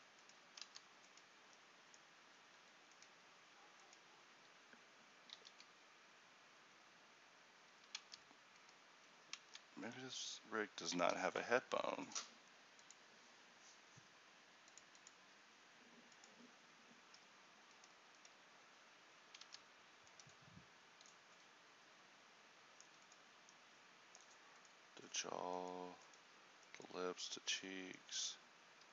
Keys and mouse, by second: 0.7 ctrl+t, 3.9-5.4 drag, 5.4 alt+h, 8.1 ctrl+t, 19.5 ctrl+t.